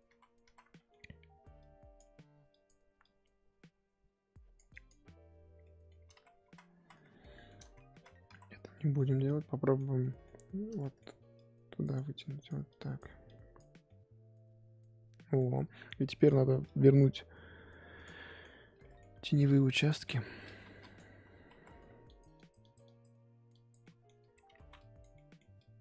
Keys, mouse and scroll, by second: 0.1 ctrl+z, 0.4 ctrl+z, 0.7 middle click, 0.9-1.6 scroll up 2, 1.6-5.5 drag, 5.5 scroll down 1, 5.6 middle click, 6.0 scroll up 1, 6.1 ctrl+z, 6.4 ctrl+z, 6.7 ctrl+z, 7.2 middle click, 7.6 ctrl+z, 7.9 ctrl+z, 8.3 ctrl+z, 8.7 middle click, 9.0-9.4 scroll up 1, 9.4-11.3 middle drag, 11.3-13.8 drag, 13.8-16.2 middle drag, 16.2-18.0 drag, 18.2 middle click, 18.5-18.8 scroll up 2, 18.8 middle click, 19.4 click, 20.0 f, 21.5 ctrl+z, 22.0-23.8 drag, 23.8 middle click, 24.2 click, 24.6 ctrl+z, 24.7 click, 25.1 middle click, 25.5 click.